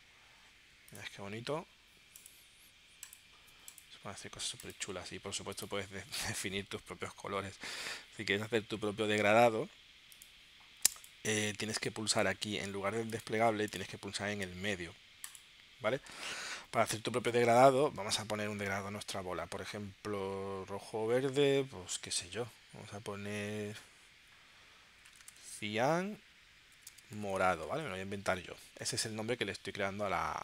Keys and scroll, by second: 25.2 shift+c, 25.3 i, 25.4 a, 25.6 n, 26.9-28.1 typing.